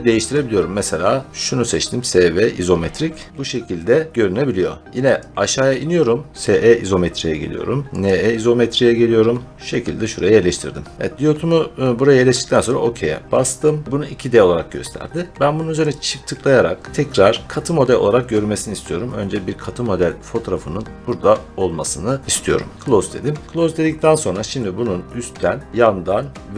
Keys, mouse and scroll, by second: 5.1 click, 6.3 click, 8.0 click, 10.4-11.0 scroll, 12.6 click, 15.8 click, 16.0 click, 17.5 click, 22.7 click, 23.4-24.6 scroll, 24.6 scroll.